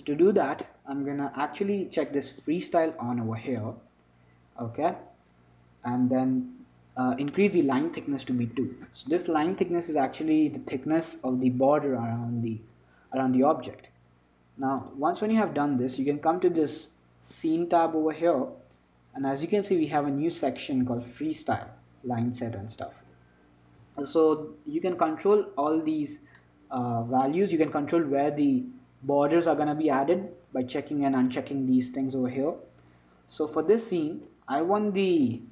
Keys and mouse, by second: 2.7-5.6 drag, 7.6-10.7 drag, 10.7-15.1 middle drag, 15.1-28.4 drag, 28.4-32.5 middle drag.